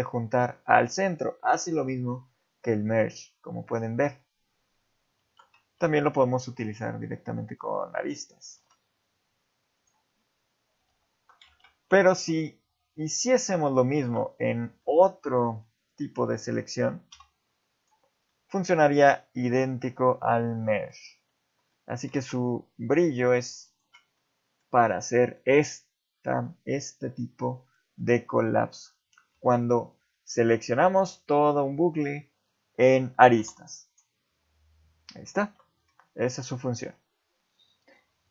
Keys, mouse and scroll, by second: 5.2 ctrl+z, 5.7 ctrl+Tab, 6.7 click, 8.6 alt+m, 10.9 ctrl+z, 11.5 ctrl+Tab, 13.9 ctrl+alt+click, 14.8 middle click, 15.6 middle click, 17.1 x, 18.3 middle click, 21.1 ctrl+z, 21.7 middle click, 22.1 ctrl+Tab, 23.2 middle click, 23.7 ctrl+alt+click, 24.2 middle click, 25.0 middle click, 26.6 middle click, 28.0 middle click, 29.4 shift+middle click, 29.8-30.1 scroll up 1, 30.1 middle click, 33.4 x, 35.4 ctrl+z, 35.9-36.6 scroll down 2, 36.8 Tab, 38.2 Tab.